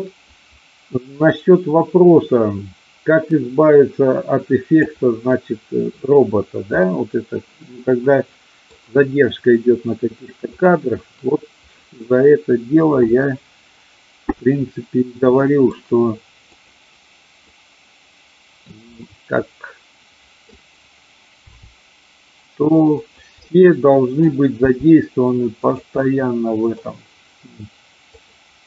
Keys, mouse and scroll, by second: 5.3-5.8 middle drag, 6.8-8.7 middle drag, 10.5 click, 15.3-15.8 middle drag, 16.5 click, 17.5-18.6 middle drag, 18.8-20.6 middle drag, 21.6 r, 22.9 click, 23.3-24.2 middle drag, 24.6 r, 25.6 click, 26.1 middle click, 28.2 click.